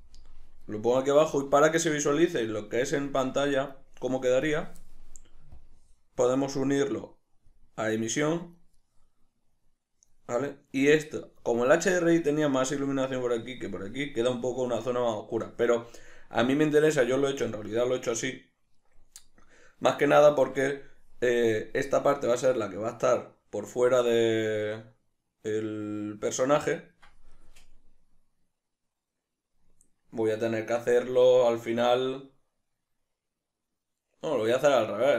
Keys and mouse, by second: 0.1 Return, 1.2-4.8 middle drag, 4.8 drag, 5.9-9.2 drag, 9.2-35.1 middle drag.